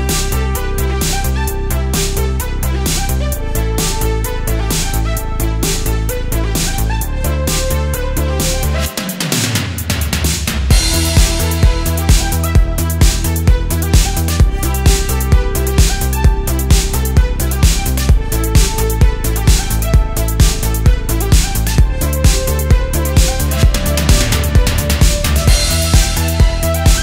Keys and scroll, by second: 0.6 space, 1.4 space, 5.5 alt+super+space, 5.6 alt+super+space, 6.7 space, 7.4 space, 8.2 space, 8.4 space, 9.7 alt+super+space, 10.4 super+s, 11.3 space, 12.4 space, 13.5 space, 13.8 space, 16.0 alt+super+space, 16.7 space, 19.7 space, 20.8 space, 21.9 space, 22.2 space.